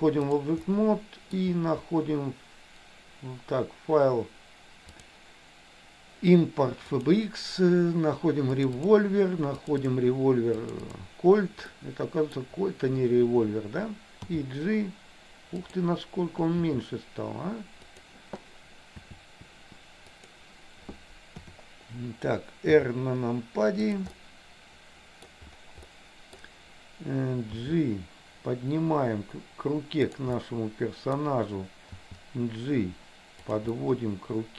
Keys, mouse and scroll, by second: 0.7 middle click, 5.0-7.4 drag, 11.7 middle click, 14.3 g, 16.6 s, 19.1 s, 21.5 KP_7, 22.7 r, 24.2-25.5 middle drag, 26.0 middle click, 27.6 g, 30.5 middle click, 32.0 g, 33.8 scroll up 1, 33.9-34.5 middle drag.